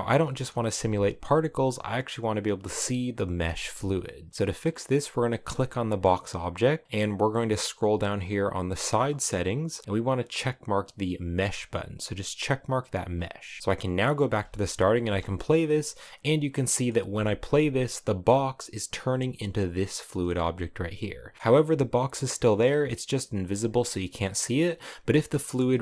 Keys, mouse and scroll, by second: 0.0 space, 0.4 space, 1.3-3.1 drag, 3.1 space, 3.3 space, 4.6 right click, 8.9 click, 11.1 click, 13.6 click, 14.0 space, 14.7 space, 15.3 click, 16.1 scroll down 9, 16.3 middle click, 16.7 space, 17.1 space, 18.7-19.8 scroll up 4, 20.7 click, 21.3-23.9 middle drag, 23.9 scroll up 2, 24.2-25.3 middle drag, 25.3 scroll up 1, 25.4 shift+middle click.